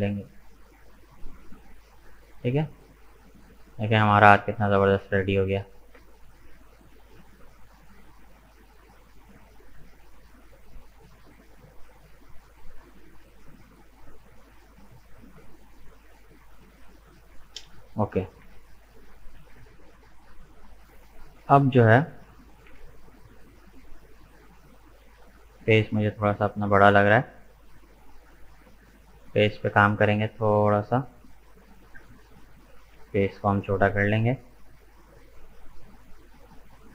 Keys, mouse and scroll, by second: 2.2 Tab, 2.3 right click, 2.8-5.4 middle drag, 5.4-5.9 scroll up 2, 6.0-10.5 middle drag, 10.8-11.2 scroll down 2, 11.2 middle click, 12.1-12.4 scroll down 2, 12.4-13.5 middle drag, 13.5-14.2 scroll down 2, 14.2-16.6 middle drag, 16.6-17.0 scroll down 2, 17.0 shift+middle click, 17.4 scroll up 2, 17.7 middle click, 18.4 KP_1, 19.2-21.1 scroll down 1, 21.1 scroll down 2, 21.3-22.7 middle drag, 22.7 KP_1, 23.7-24.2 scroll up 1, 24.2-27.4 shift+middle drag, 27.8 right click, 28.0 scroll down 1, 28.1 Tab, 28.7-29.2 scroll up 2, 29.2-32.2 middle drag.